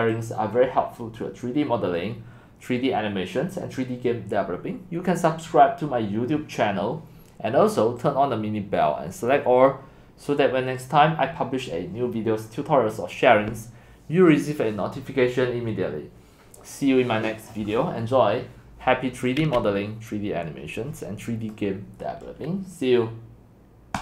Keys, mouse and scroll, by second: 5.3 click, 11.6 click, 21.5-24.0 drag.